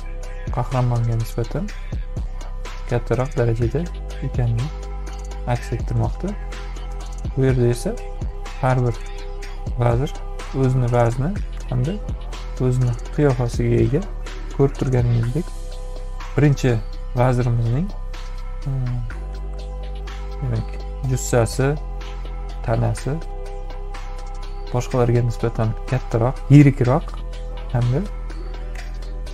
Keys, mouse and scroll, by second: 1.1-2.2 drag, 4.8-6.3 drag, 8.9 space, 9.1-10.7 drag, 11.8 space, 11.9 click, 13.2 click, 14.4 click, 14.4 right click, 16.4 ctrl+-, 18.2-20.7 drag, 21.9 ctrl+z.